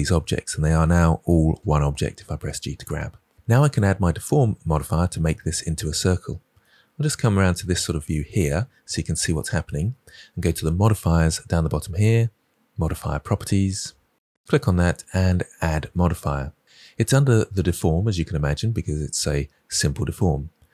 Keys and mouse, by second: 0.6 g, 2.7-3.3 drag, 15.6-20.7 drag.